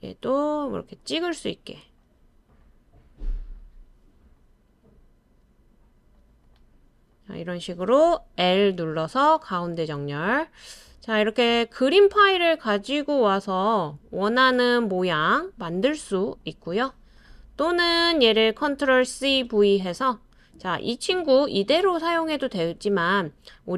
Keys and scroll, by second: 8.4 BackSpace, 19.1 super+c, 19.4 super+v.